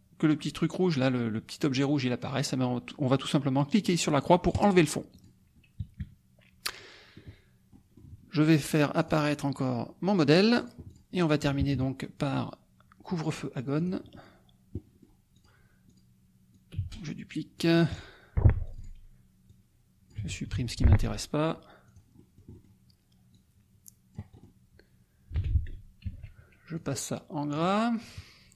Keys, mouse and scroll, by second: 0.4 click, 4.5 click, 5.1 click, 6.0 KP_Subtract, 7.7 middle click, 9.0 click, 10.5 click, 10.9 click, 11.6 KP_Subtract, 13.7 click, 14.7 middle click, 15.3 click, 15.8 click, 16.5-18.2 drag, 16.7 space, 18.7 click, 19.4-20.5 drag, 20.1 BackSpace, 20.5 Delete, 21.8 click, 23.3 click, 24.4 click, 25.3 t, 26.0 ctrl+a, 26.7 click, 27.9 click.